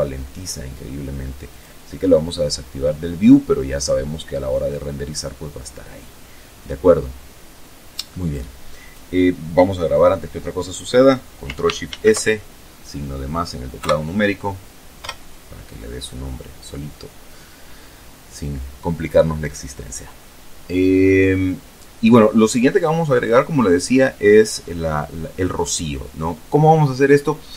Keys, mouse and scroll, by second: 0.2 click, 1.1-7.0 drag, 10.6 ctrl+shift+s, 12.4 KP_Add, 13.6 Return.